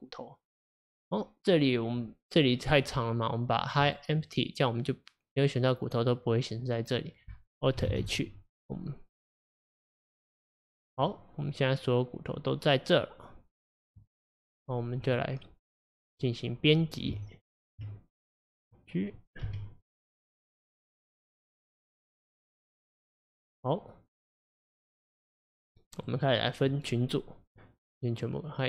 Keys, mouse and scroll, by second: 3.9 click, 7.9 alt+h, 11.1-14.1 middle drag, 15.1 drag, 15.8 click, 17.1 Tab, 18.6 click, 19.5 g, 25.5-28.2 middle drag, 28.2-28.6 drag.